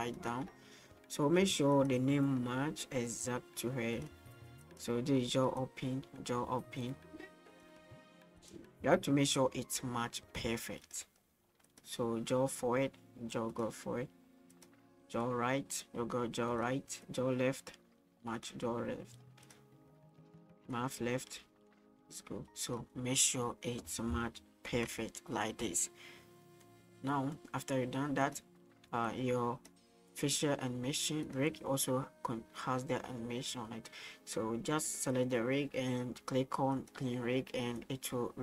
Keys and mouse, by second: 2.8-4.0 drag, 5.7-7.5 drag, 8.4 click, 9.3-10.8 drag, 12.5-13.5 drag, 15.2-16.5 drag, 17.7 click, 20.7-22.7 drag, 24.9 ctrl+s, 26.2-26.6 middle drag, 28.2 click, 29.1-29.8 drag, 30.1 middle click, 31.3 right click, 31.9-34.9 drag, 36.7 click, 37.8-38.4 drag.